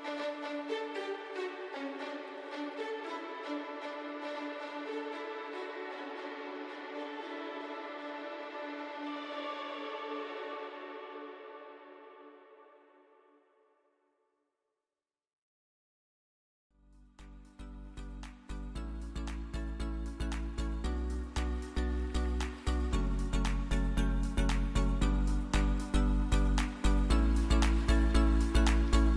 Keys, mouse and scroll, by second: 1.1 click, 6.3 click, 9.0 click, 12.2 click, 16.2 alt+scroll up 1, 19.0 click, 20.7 alt+scroll down 1, 23.5 scroll down 1, 23.5 alt+scroll up 1, 23.9-24.3 alt+scroll down 2, 24.3 alt+scroll up 1, 27.5 alt+scroll down 1.